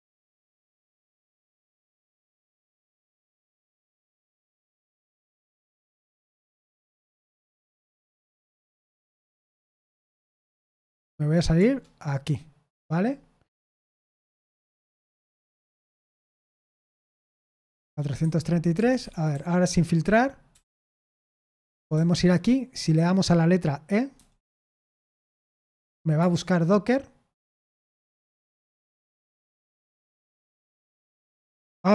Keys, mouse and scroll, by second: 1.8 Tab, 4.1 typing, 5.1 BackSpace, 7.1 e, 8.0 BackSpace, 8.3 Return, 9.8-10.8 typing, 11.5 Return, 15.4 k, 16.5 BackSpace, 16.7 BackSpace, 18.2 3, 18.7 Escape, 19.0 Escape, 19.3 j, 20.5 BackSpace, 21.1 Down, 21.6 Down, 21.9 Down, 24.1 e, 26.1 BackSpace, 30.6 ctrl+w.